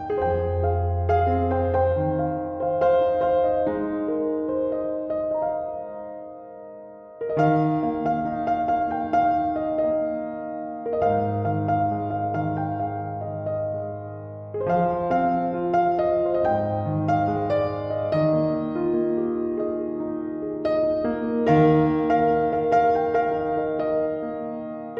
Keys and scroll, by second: 12.3 BackSpace, 13.1 BackSpace.